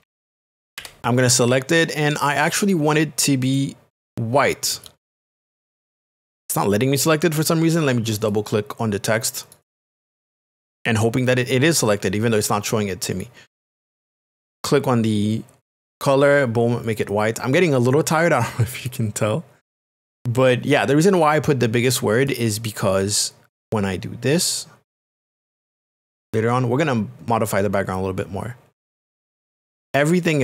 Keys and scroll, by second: 0.0-1.3 typing.